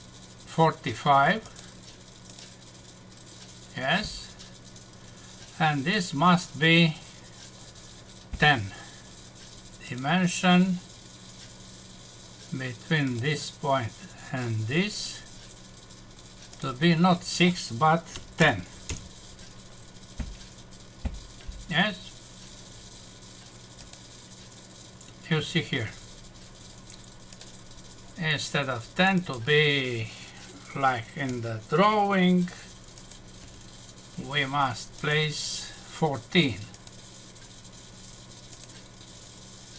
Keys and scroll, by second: 18.9 Return, 31.3 Escape, 33.4 Delete.